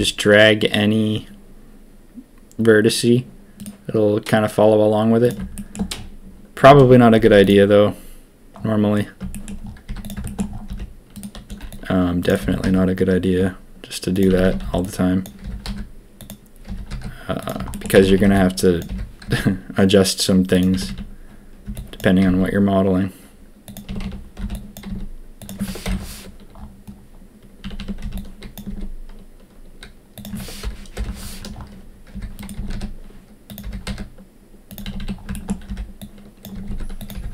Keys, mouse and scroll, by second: 5.2 click, 5.5 shift+middle click, 5.9 scroll up 1, 6.6 a, 6.7 a, 7.1 z, 9.3 shift+click, 9.8 z, 10.2 shift+click, 10.6 b, 11.4 c, 12.4 g, 14.2 a, 14.4 a, 14.6 b, 15.4 g, 16.6 g, 17.7 shift+click, 17.9 a, 18.0 a, 18.2 b, 18.8 g, 20.7 a, 20.8 a, 21.6 b, 22.2 s, 23.8 a, 24.0 a, 24.3 b, 24.8 s, 25.8 ctrl+KP_3, 27.6 a, 27.7 a, 27.9 b, 28.6 s, 30.9 ctrl+KP_1, 31.0 ctrl+middle click, 32.1 g, 32.5 s, 33.6 g, 34.8-37.3 typing, 35.3 shift+middle click.